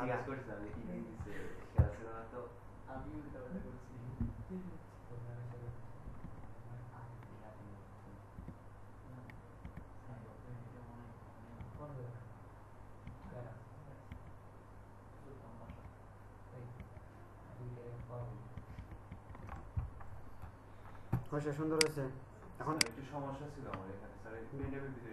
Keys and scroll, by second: 6.2 Right, 18.5 Right, 18.7 Right, 19.1 Right.